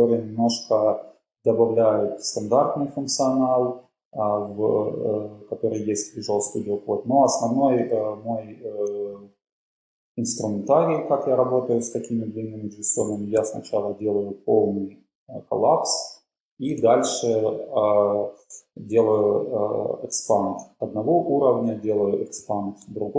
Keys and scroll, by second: 8.9 super+Up, 9.8 Down, 13.2 super+k, 13.6 super+[, 16.9 alt+super+], 18.4 Page_Down, 18.5 Page_Down, 18.9 Down, 22.4 alt+super+].